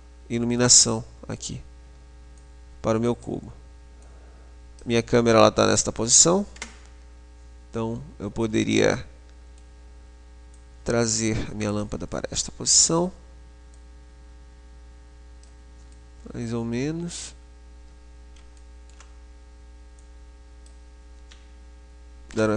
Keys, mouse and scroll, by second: 0.8-2.6 middle drag, 2.6-5.9 drag, 6.4 KP_0, 9.1-12.1 middle drag, 10.8 click, 12.4-13.9 middle drag, 13.9 click, 16.1 middle click, 16.9-18.6 middle drag, 18.8-20.3 middle drag, 20.3 click.